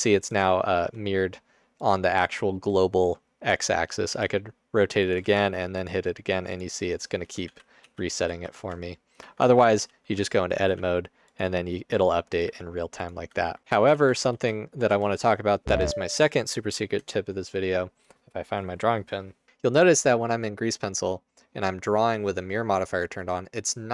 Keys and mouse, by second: 0.9 g, 4.3 r, 5.3 ctrl+a, 7.6 ctrl+z, 7.8 ctrl+z, 8.3 ctrl+z, 9.3 Tab, 9.8 a, 10.7 r, 11.5 g, 12.6 r, 13.4 Tab, 13.6 ctrl+z, 14.1 ctrl+z, 14.5 ctrl+z, 14.9 Tab, 19.5 Tab, 19.5 r, 19.5 g.